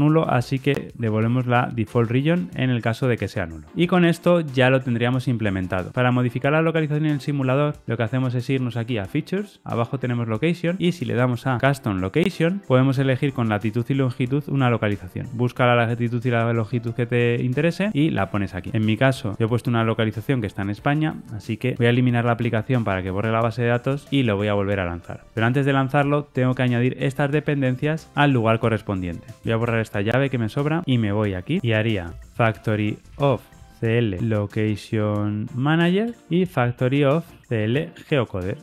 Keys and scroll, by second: 0.2 Tab, 36.1 Return.